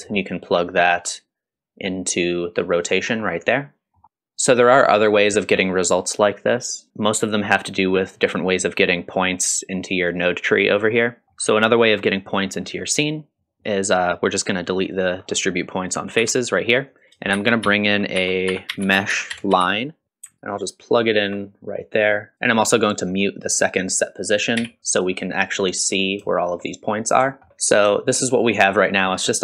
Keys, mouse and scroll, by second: 1.0-2.6 drag, 3.0 scroll down 1, 3.3 middle click, 4.3 scroll up 1, 6.9-7.2 scroll up 2, 10.9-11.2 scroll down 2, 11.2 middle click, 13.0 click, 13.7 click, 15.2-15.5 scroll up 1, 16.2 x, 16.5 middle click, 16.9 click, 17.3 shift+a, 20.0-20.4 scroll down 1, 20.4-21.2 alt+right drag, 21.8 middle click, 22.3 click, 22.3 scroll down 2, 22.5-23.1 scroll up 1, 23.1-23.5 scroll up 2, 24.6 m, 25.1-26.2 scroll down 3, 25.4-25.7 middle drag, 26.3 shift+middle drag, 26.8-27.8 scroll down 4, 27.5 shift+z, 27.9 shift+middle click.